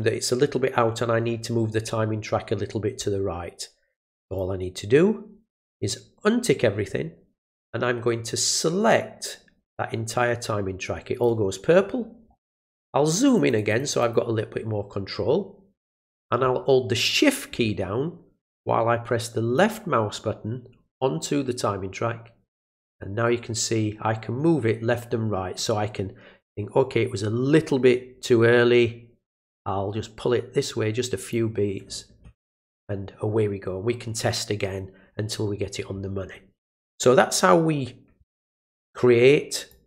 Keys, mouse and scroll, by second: 4.2 click, 8.2-11.2 drag, 13.1 click, 13.3 click, 13.5 click, 13.8 click, 14.0 click, 19.5-31.3 shift+drag, 39.7-39.8 drag.